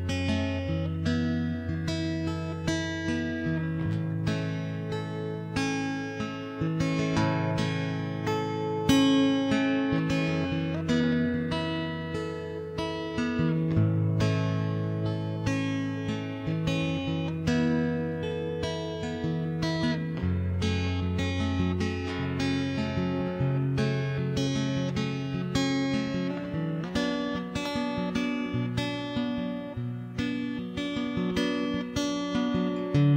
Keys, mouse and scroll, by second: 0.0 a, 0.1 a, 0.8 ctrl+Tab, 1.1 a, 1.2 a, 1.3 a, 1.5 c, 2.7 middle click, 3.4 w, 3.6 ctrl+Tab, 4.0 middle click, 4.4 ctrl+KP_Subtract, 5.3 a, 5.5 a, 5.9 c, 7.1 z, 7.3 z, 7.4 middle click, 8.0 g, 8.6 middle click, 9.8-11.5 right drag, 10.4 middle click, 11.1 middle click, 11.5 z, 12.3 c, 12.4 g, 12.9 g, 13.4 middle click, 15.1 middle click, 16.0 c, 17.0 middle click, 17.4 middle click, 18.0 shift+Tab, 18.2 right click, 18.6 middle click, 19.1 c, 19.6 a, 19.8 c, 20.2 middle click, 21.0 middle click, 21.2 ctrl+Tab, 21.6 c, 22.8 middle click, 23.6 ctrl+Tab, 23.8 middle click, 23.9 w, 24.3 middle click, 24.5 click, 25.3 middle click, 25.9 middle click, 28.6 middle click, 28.9 ctrl+z, 29.6 a, 29.8 a, 30.2 ctrl+KP_3, 30.4 c, 32.0 w, 32.2 x.